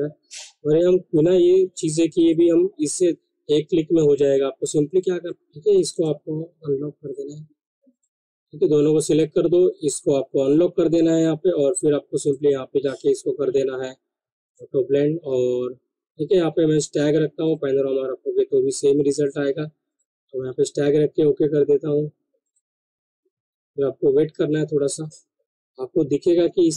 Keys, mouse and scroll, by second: 2.0 ctrl+Num_Lock, 2.3 ctrl+click, 5.2 ctrl+z, 5.7 click, 7.9 ctrl+click, 12.2 click, 14.7 click, 17.4 click, 19.9 click, 22.4 click.